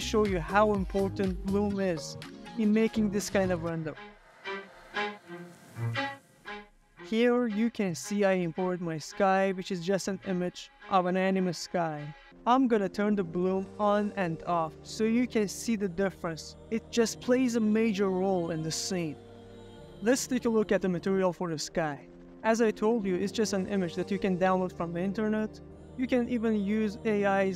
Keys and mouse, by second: 1.1 z, 3.7 click, 5.9 click, 13.9 click, 16.4 click, 19.7 middle click, 20.2 shift+click, 20.5 middle click, 20.7 ctrl+middle click, 20.9 shift+middle drag, 21.1 middle click, 21.4 middle drag, 21.5 z, 22.3 shift+middle click, 22.6 ctrl+middle click, 22.8 middle click, 23.6 shift+middle click, 23.9 ctrl+middle click, 24.0 middle click, 24.3 shift+middle click, 24.6 ctrl+middle click, 24.8 shift+middle click, 25.0 ctrl+middle click, 25.2 ctrl+middle click, 25.4 shift+middle drag, 25.6 ctrl+middle click, 25.7 shift+middle click, 25.9 click, 26.4 g, 27.2 Escape.